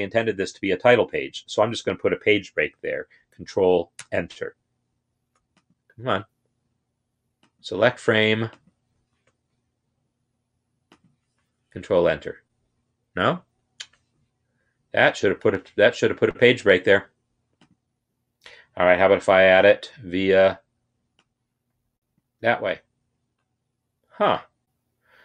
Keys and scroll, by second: 3.8 ctrl+Return, 11.7 ctrl+Return.